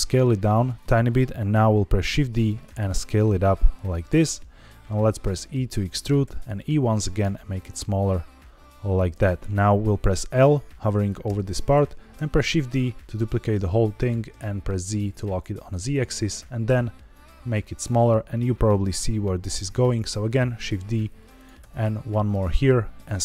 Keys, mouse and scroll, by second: 0.7 click, 2.0 shift+d, 2.3 right click, 2.6 s, 3.7 click, 5.2 e, 5.9 click, 6.2 e, 7.1 click, 7.3 s, 8.9 click, 11.2 l, 12.1 shift+d, 14.2 z, 15.8 click, 16.3 s, 17.8 click, 19.6 shift+d, 20.5 z, 21.3 click, 21.5 s, 22.2 click, 22.5 s, 22.6 z.